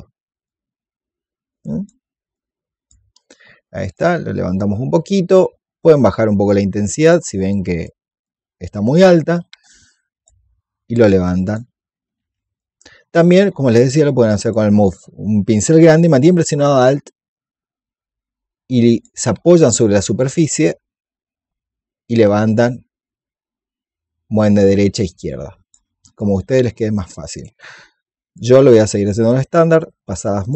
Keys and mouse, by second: 3.7 click, 5.8-7.2 drag, 7.4 alt+click, 8.1-11.9 drag, 12.1 ctrl+z, 12.5-14.3 drag, 16.6-18.9 alt+drag, 20.3-25.6 alt+drag, 26.1-30.5 drag.